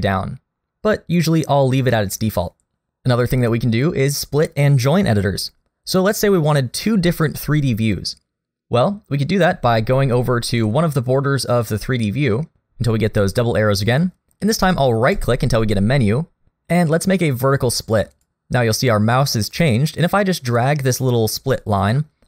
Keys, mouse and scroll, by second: 1.1 click, 15.1 right click.